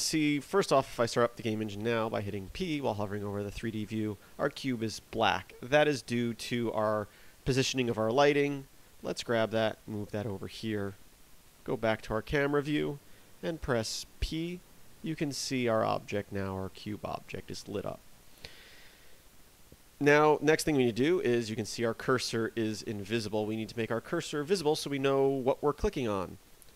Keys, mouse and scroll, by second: 6.5 KP_7, 7.6-8.1 scroll down 4, 8.3 right click, 9.2 g, 9.9 click, 10.9 KP_0, 12.7 p, 22.7 p.